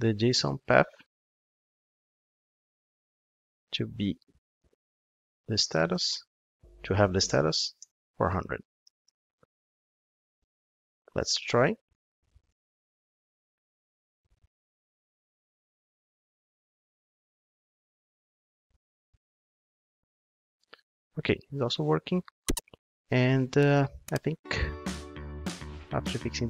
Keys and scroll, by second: 2.5 super+x, 12.3 ctrl+shift+d.